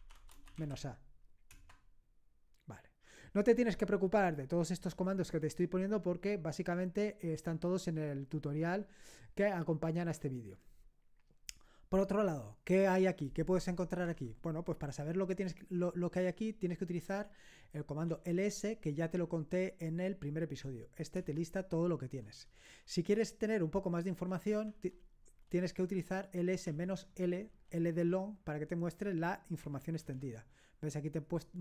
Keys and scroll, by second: 0.0-1.0 typing, 1.5 Return, 16.3 typing, 18.1 typing, 21.2 Return, 24.1-25.4 typing, 26.7 typing, 30.0 Return.